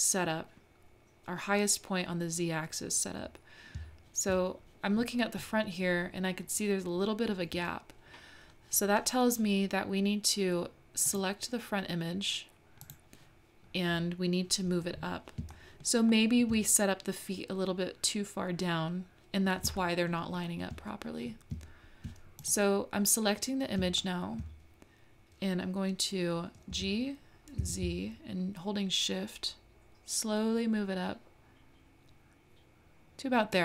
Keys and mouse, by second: 3.7-6.8 middle drag, 11.1 click, 12.8 click, 15.5 shift+click, 15.5 shift+right click, 15.6 shift+middle click, 16.1 shift+middle click, 19.8 shift+middle click, 20.5-20.9 shift+middle drag, 24.0-24.6 shift+middle drag, 26.7 g.